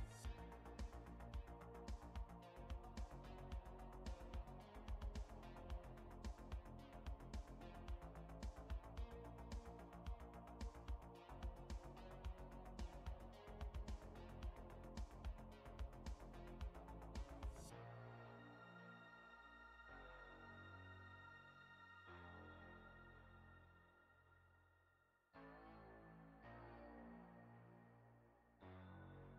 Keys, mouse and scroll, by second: 0.4 shift+middle click, 5.8 shift+d, 15.5 click, 16.7 middle click, 19.9 click, 21.1 middle click, 23.5 click, 24.5 click, 26.6 click.